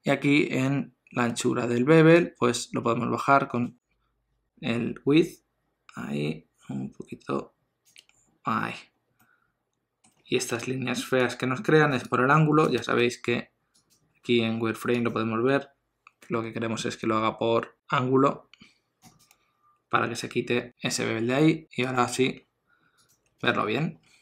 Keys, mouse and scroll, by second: 2.2 shift+click, 8.2-8.8 scroll up 1, 9.2 middle click, 13.7 click, 19.0 click, 21.8 click, 23.5 alt+a, 23.7 scroll down 1.